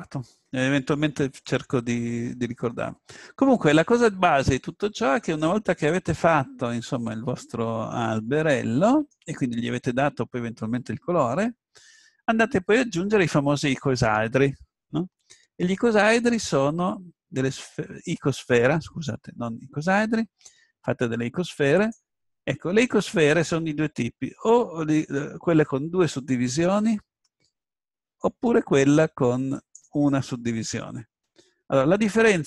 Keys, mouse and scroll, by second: 2.7 click, 3.2-4.6 middle drag, 6.7-8.9 middle drag, 15.9 shift+a, 29.6-31.7 drag.